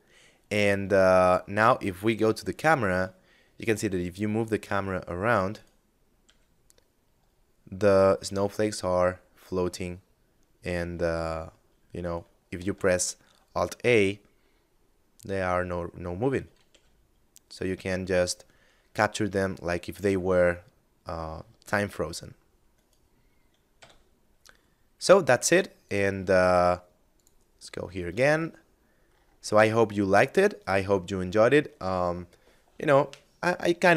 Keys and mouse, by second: 1.0 KP_0, 2.6 g, 4.6 right click, 5.4 g, 11.2 right click, 11.7 alt+a, 15.9 g, 22.0 right click, 23.0 a, 25.0 click, 27.6 middle click.